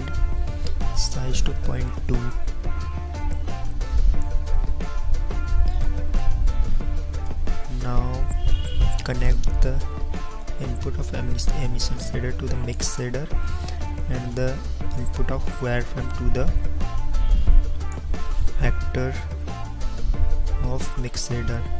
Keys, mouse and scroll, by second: 15.2-17.9 drag.